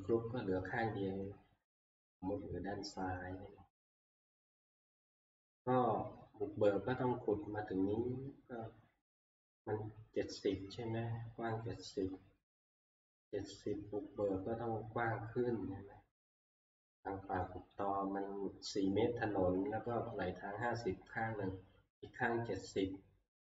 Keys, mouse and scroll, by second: 0.1 click, 2.2 click, 12.8 middle click, 12.8 middle click, 17.7 click.